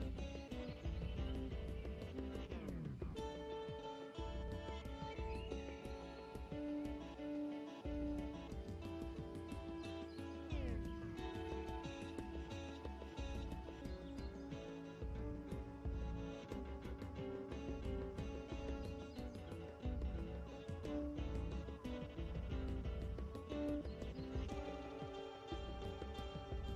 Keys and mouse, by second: 0.1 shift+d, 0.3 s, 0.8 click, 1.3 Tab, 1.6 r, 2.8 Tab, 3.1 ctrl+a, 4.6 Tab, 5.9-8.4 middle drag, 8.4 s, 10.9 Tab, 10.9-11.9 drag, 12.3 o, 18.5 KP_0, 19.4 KP_0, 24.2 Tab, 24.5 a, 24.6 a, 24.6 s, 25.2 s.